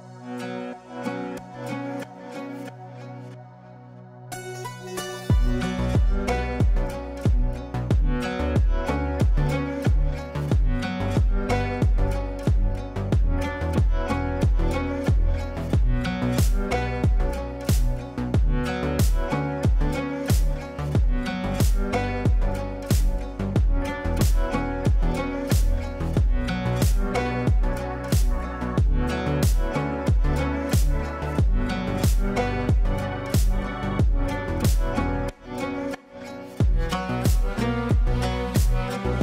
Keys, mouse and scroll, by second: 3.1 right click, 4.6 click, 5.9 right click, 7.0-12.0 drag, 12.0 F2, 12.4-13.0 drag, 15.3-21.3 drag, 23.7-26.6 typing, 27.6 ctrl+space, 28.6 ctrl+space, 29.7-31.7 drag, 32.3-34.6 typing.